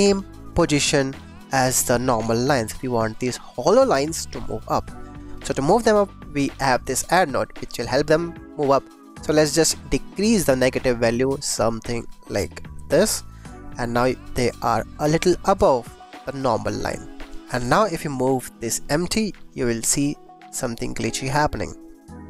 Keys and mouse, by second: 5.6 click, 6.0 click, 6.8 click, 9.3-12.4 shift+drag, 13.8 click, 14.2 click, 14.6 click, 16.1-17.3 shift+drag, 18.3 g, 18.4 x.